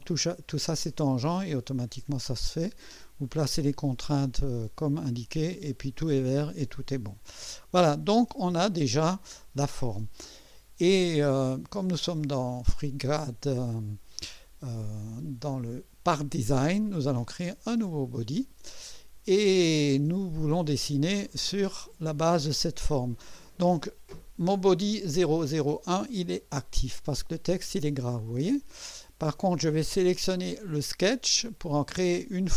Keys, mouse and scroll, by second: 7.5 click, 12.4 click, 17.7 click, 26.9 click, 31.0 click.